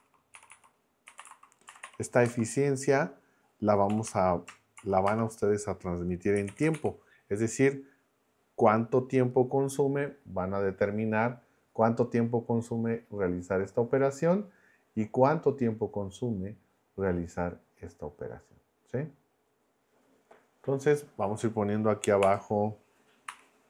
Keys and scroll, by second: 0.0-2.3 typing, 3.9 -, 4.8 shift+., 5.0 space, 6.1-7.2 typing, 22.2 Escape, 23.3 m.